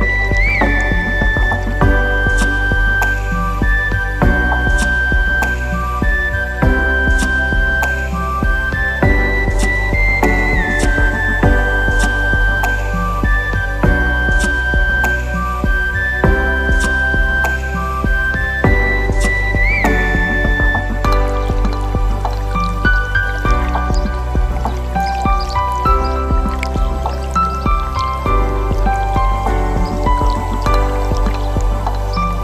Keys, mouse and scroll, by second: 2.3 click, 5.9-6.9 middle drag, 9.5 click, 11.3 KP_Divide, 12.2 scroll down 2, 12.7-13.4 middle drag, 13.9 Tab, 15.9 click, 17.0 click, 17.6 middle click, 18.7 click, 20.0 shift+click, 20.8 shift+click, 21.7 shift+click, 22.0-22.7 middle drag, 23.1 shift+click, 23.8 shift+click, 24.4 shift+click, 25.0 shift+click, 25.6 shift+click, 25.9-26.5 middle drag, 27.1 shift+click, 28.1 shift+drag, 28.7 shift+click, 29.1 shift+click, 29.5 shift+click, 29.9-30.7 middle drag, 31.2 shift+drag, 31.8 shift+click, 32.1-32.4 middle drag.